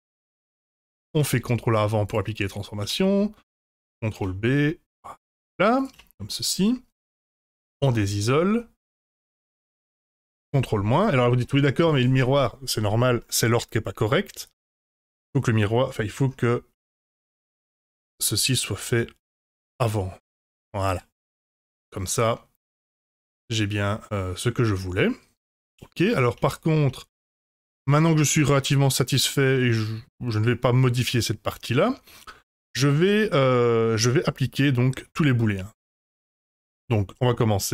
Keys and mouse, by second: 0.5 Tab, 1.1 ctrl+a, 2.8 Tab, 4.1 ctrl+b, 5.9 Tab, 7.2 KP_Divide, 8.2-8.8 middle drag, 11.4-11.8 middle drag, 17.6-19.8 drag, 20.8 click, 21.2-25.9 middle drag, 26.3 Tab, 27.0 Tab, 27.9-33.9 middle drag.